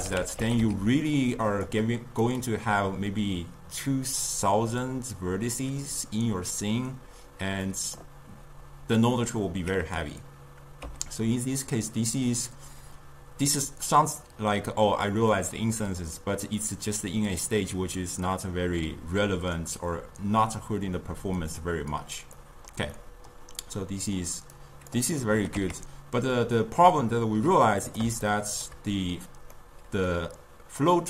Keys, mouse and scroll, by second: 7.7 click, 10.9 x, 22.4 middle click, 22.9 scroll down 2, 23.0-24.6 middle drag, 24.6 click, 25.5 g, 28.3-31.0 shift+middle drag.